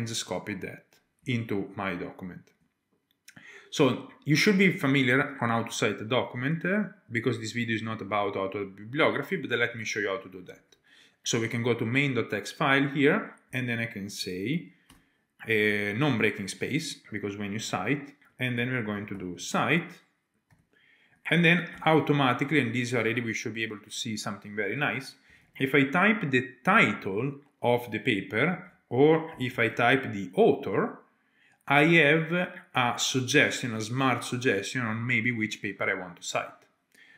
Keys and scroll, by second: 3.0 typing, 29.6-30.4 typing.